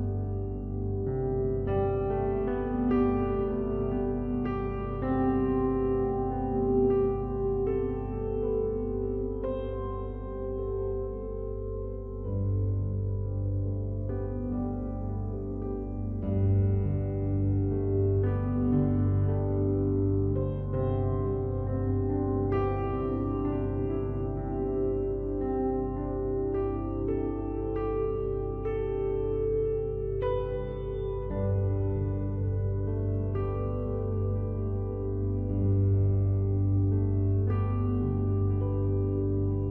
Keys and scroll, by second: 15.8 ctrl+t, 38.4 ctrl+d.